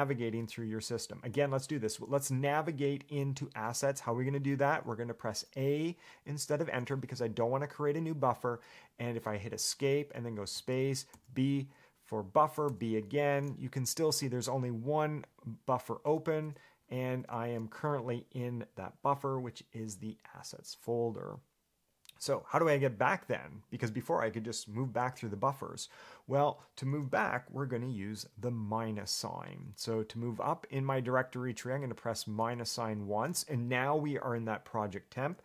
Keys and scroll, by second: 1.5 Escape, 6.8 a, 9.8 Escape, 17.4 Escape, 32.6 -.